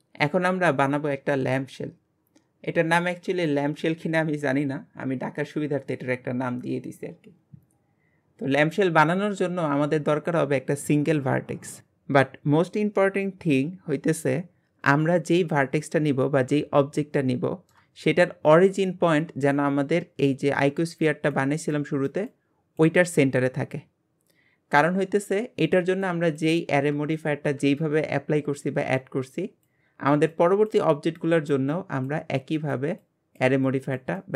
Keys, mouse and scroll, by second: 16.9 shift+middle click, 17.9-20.6 scroll up 1, 20.6-26.8 scroll up 1, 27.0-31.3 scroll down 1, 31.3-34.3 scroll down 1.